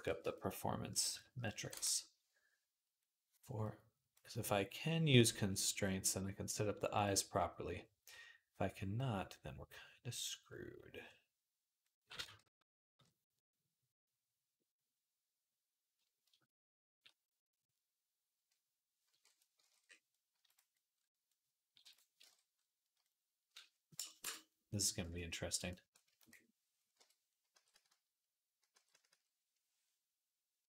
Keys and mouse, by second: 0.9 ctrl+i, 3.6 click, 5.5 click, 5.8-20.4 drag, 13.7 ctrl+r, 17.7 ctrl+r, 18.9 alt+m, 19.5 ctrl+Tab, 20.4 middle click, 20.6 click, 21.2-23.9 drag, 25.5 click, 26.8-28.9 typing.